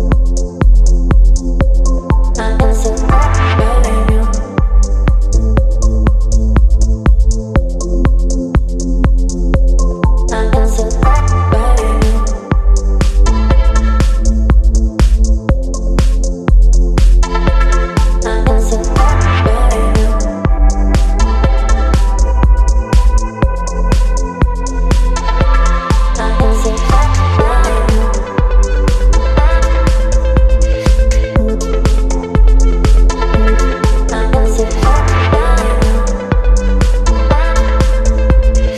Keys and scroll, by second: 1.2 v, 6.4 space, 11.5 space, 15.3 space, 20.5 Return, 21.3 Down, 22.1 Down, 22.2-22.5 Down, 23.1 space, 26.4 ctrl+t, 32.8 space, 33.9 Left, 34.0 Left, 34.2 Left, 34.3 Left, 35.4 Up, 35.6 Up, 35.7 Up, 35.8 Up, 35.9 Up, 36.1 Up, 36.2 Up, 36.3 Up, 36.4 Up, 37.4 Up, 37.5 Up, 37.6 Up, 37.8 Up.